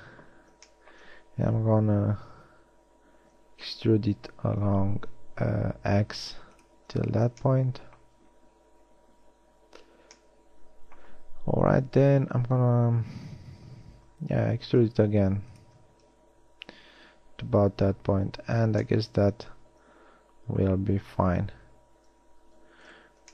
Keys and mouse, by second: 2.4 e, 11.7 KP_1, 13.9 e, 23.0 middle click.